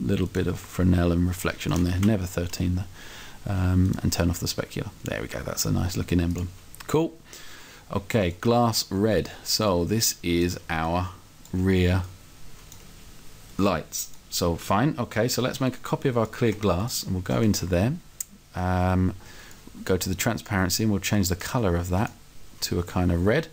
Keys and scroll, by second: 2.1 Down.